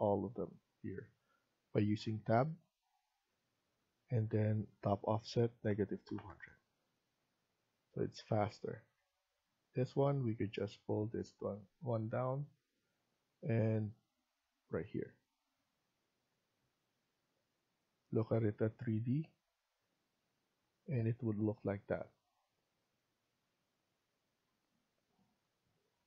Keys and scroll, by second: 3.4 Tab, 5.6-6.2 typing, 8.4 Escape, 8.7 Escape, 8.8 Escape, 14.8 Escape, 17.6 Escape.